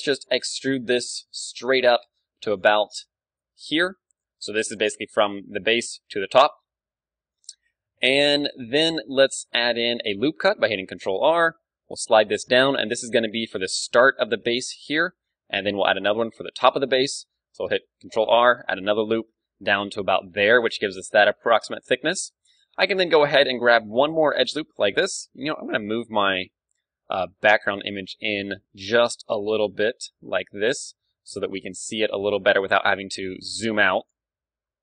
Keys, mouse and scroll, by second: 0.1 e, 2.5-6.9 drag, 2.9-4.8 ctrl+d, 5.0 ctrl+d, 6.2 ctrl+d, 6.3 right click, 6.9-10.4 right drag, 8.0 d, 8.6-10.4 middle drag, 10.6 ctrl+r, 13.2-17.6 drag, 13.7-15.7 d, 17.7 ctrl+r, 21.9-23.7 drag, 23.7-24.9 middle drag, 24.3-26.4 right drag, 25.2 n, 26.4 a, 27.7 a, 28.1-29.6 middle drag, 29.6-32.0 drag, 32.0 d, 32.2-34.0 right drag, 34.4 n, 34.6-34.8 middle drag.